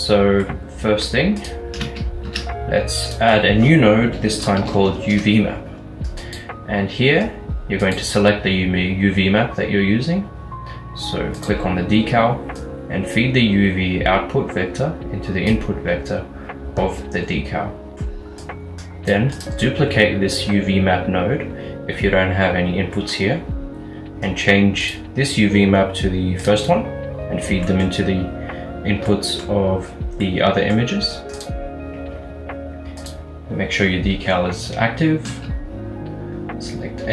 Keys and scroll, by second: 2.3 a, 4.5 u, 4.7 v, 5.2 Return, 7.0 typing, 9.5-10.2 typing, 34.4 Tab, 35.5 a.